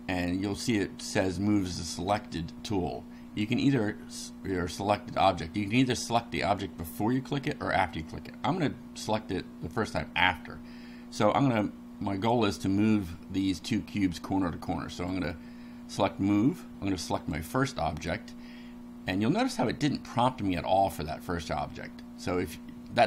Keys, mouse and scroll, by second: 14.9 click, 17.2 click.